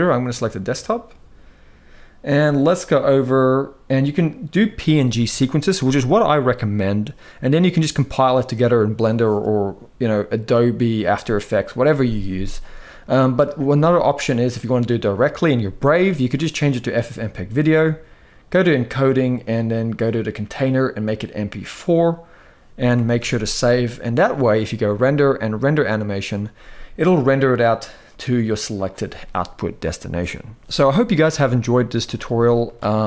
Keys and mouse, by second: 13.7-16.8 drag, 18.2 click, 19.8-21.6 drag, 22.9 ctrl+s, 23.0 ctrl+s, 24.6-26.3 drag, 32.0 z.